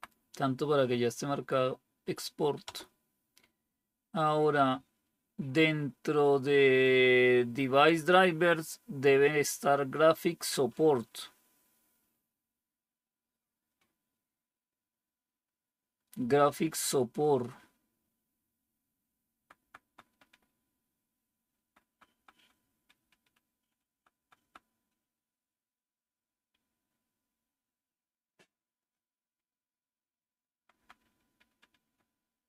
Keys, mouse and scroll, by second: 2.6 Return, 19.2 Down, 19.5 Down, 19.8 Down, 20.0 Down, 20.2 Down, 21.6 Down, 21.8 Down, 22.0 Down, 22.3 Down, 22.5 Down, 22.7 Down, 22.9 Down, 25.9 Up, 26.2 Up, 26.4-28.8 Up, 30.5 Down, 30.7 Down, 30.9 Down, 31.1 Down.